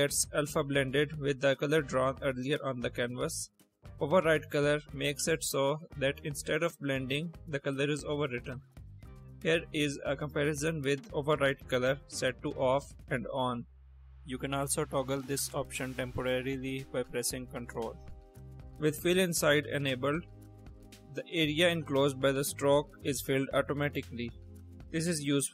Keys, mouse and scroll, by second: 1.9 click, 2.6-3.0 drag, 3.5 click, 3.9 click, 5.9 click, 6.9 click, 7.4-8.0 drag, 8.2 click, 9.5 click, 11.3 middle click, 12.5 click, 13.1-14.2 drag, 14.4 click, 15.8 ctrl+click, 17.5 ctrl+click, 18.5 click, 19.6 click, 20.8 click, 22.7 click, 23.2 click, 25.0 click.